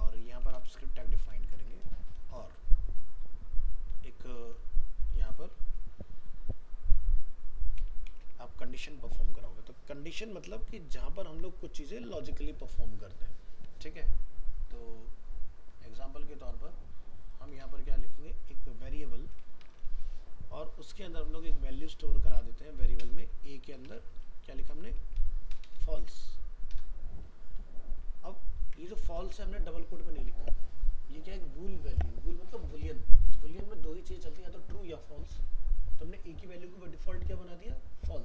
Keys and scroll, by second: 8.6 ctrl+s, 28.6 ctrl+s.